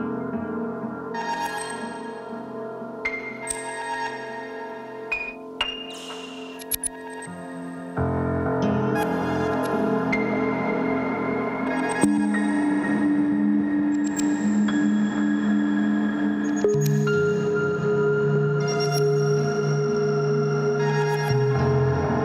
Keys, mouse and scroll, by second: 0.0 ctrl+z, 5.9 Escape, 10.2 Delete, 12.5 Escape, 15.0 Delete, 17.8 ctrl+z, 18.1 ctrl+z, 18.7 ctrl+z, 19.2 ctrl+z.